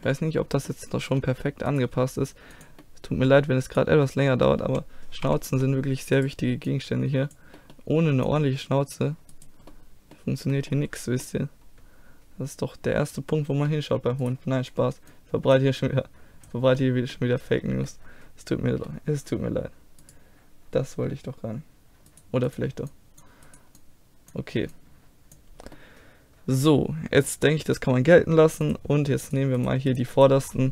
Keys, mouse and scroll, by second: 1.7 right click, 1.9 g, 2.5 click, 3.7-5.6 right drag, 5.2 z, 6.2 click, 6.3-7.9 middle drag, 7.9-9.3 drag, 9.3-11.8 middle drag, 12.2-13.3 middle drag, 13.6 middle click, 14.2-16.2 right drag, 15.1-18.0 drag, 18.0-20.0 middle drag, 20.0-21.9 right drag, 22.1 click, 25.2 click, 25.9 middle click, 26.8 middle click, 27.5-28.7 middle drag, 28.7-30.7 drag, 29.3-30.7 right drag.